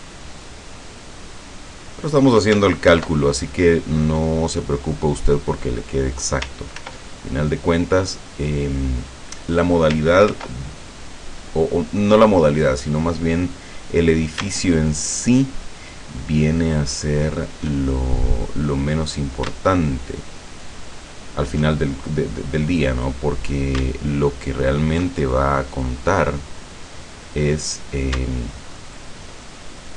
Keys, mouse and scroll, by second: 2.1 click, 2.9 ctrl+r, 3.5 ctrl+click, 6.0 click, 6.8 ctrl+r, 7.2 ctrl+click, 9.4 click, 10.3 ctrl+r, 10.8 ctrl+click, 13.4 click, 15.0 alt+shift+right click, 17.0 alt+shift+right click, 17.9-18.9 alt+shift+middle drag, 19.8 alt+shift+right click, 21.1 alt+shift+right click, 22.3-23.6 middle drag, 24.6 alt+shift+right click, 25.2-27.5 alt+shift+middle drag, 28.9 alt+shift+right click.